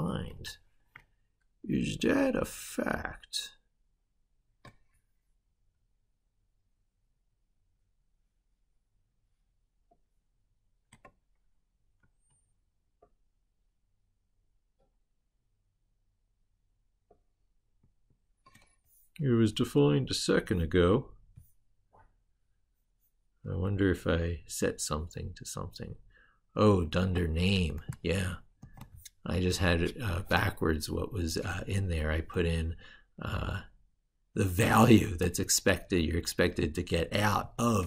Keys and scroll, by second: 11.8 ctrl+super+Left, 17.6 ctrl+super+Right, 28.4 ctrl+c, 37.2 ctrl+v.